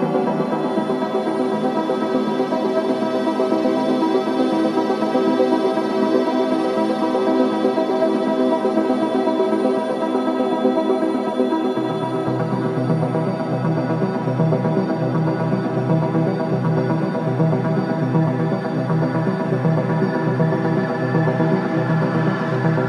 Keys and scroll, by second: 0.8 4, 4.4 2, 5.2 shift+i, 10.3 ctrl+z, 15.6 4, 16.3 1, 18.0 4.